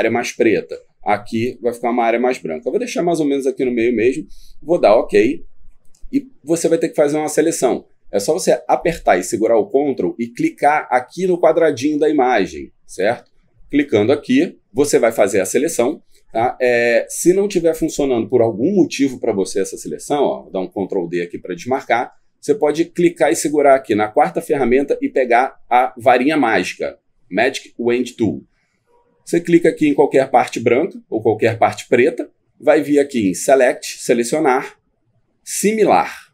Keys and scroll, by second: 20.3 ctrl+d.